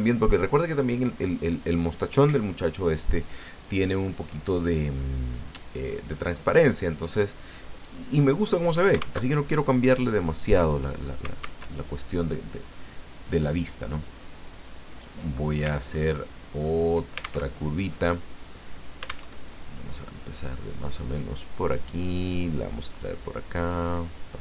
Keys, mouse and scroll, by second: 9.2 alt+Tab, 11.6 alt+Tab, 15.1 click, 15.9-16.3 ctrl+scroll up 2, 16.6 ctrl+scroll up 2, 17.5 ctrl+alt+Tab, 19.3 alt+Tab, 20.9 click, 21.5-22.6 drag, 23.6 click.